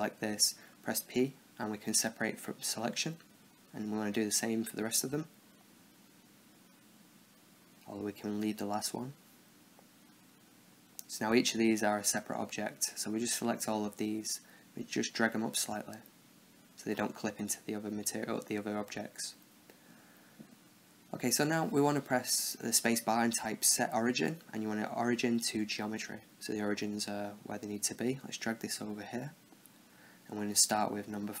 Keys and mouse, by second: 1.1 p, 3.5 b, 4.4 p, 5.6 b, 6.5 p, 7.7 b, 8.2 p, 9.0 Tab, 10.0-11.4 right drag, 11.9-14.0 right drag, 12.5 z, 14.0-16.0 middle drag, 16.0-17.1 drag, 17.8-18.9 middle drag, 18.9 KP_0, 19.4 KP_7, 20.4-21.9 middle drag, 21.1 space, 27.4-29.4 drag, 29.7-31.4 drag, 30.6 KP_0.